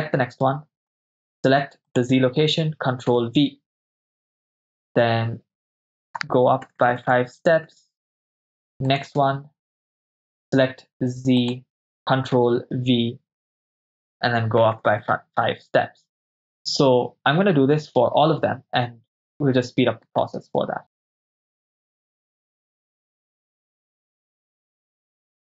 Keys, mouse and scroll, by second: 0.9 click, 1.9 click, 3.3 ctrl+v, 6.8 Right, 6.9 Right, 7.0 Right, 7.2 Right, 7.8 Right, 9.1-10.3 drag, 9.1 right click, 11.4 click, 12.7 ctrl+v, 14.9 Right, 15.0 Right, 15.2 Right, 15.5 Right, 20.2 right click, 21.0 ctrl+v, 21.3 ctrl+z, 21.3 click, 21.4 click, 21.5 ctrl+v, 21.7 Right, 21.7 Right, 21.9 right click, 22.1 click, 22.3 ctrl+v, 22.5 Right, 22.6 Right, 22.7 right click, 22.9 click, 23.1 ctrl+v, 23.2 Right, 23.3 Right, 23.5 right click, 23.7 click, 23.8 ctrl+v, 23.9 Right, 24.0 Right, 24.2 right click, 24.3 click, 24.6 ctrl+v, 24.6 Right, 24.7 Right, 24.8 right click, 24.9 click, 25.0 click, 25.2 ctrl+v, 25.3 Right, 25.3 Right.